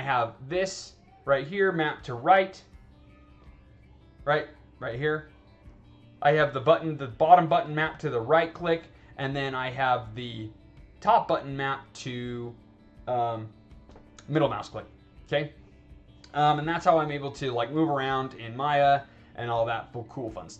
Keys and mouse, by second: 3.8 right click, 4.2 right click, 4.8 right click, 5.1 right click, 5.3 right click, 17.3-17.7 alt+drag, 17.9 alt+right drag, 18.5 alt+drag, 19.5 alt+right drag.